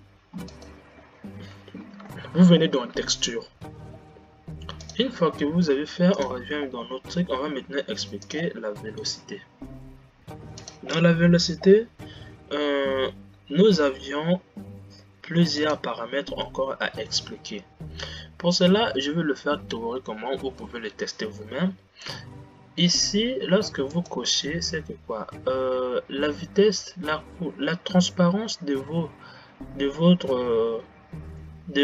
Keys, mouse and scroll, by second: 1.0 click, 24.3 click.